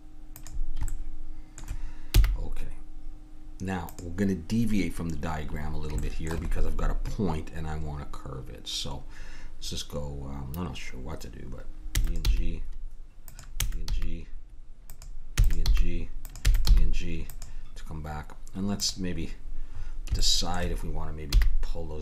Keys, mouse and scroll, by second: 2.1 g, 5.2 middle click, 5.7-10.3 middle drag, 12.0 e, 12.2 g, 13.5 e, 13.9 g, 15.3 e, 15.7 g, 16.4 e, 16.7 g, 18.8 click, 19.7 middle click, 19.8 click, 20.6 click, 21.3 g.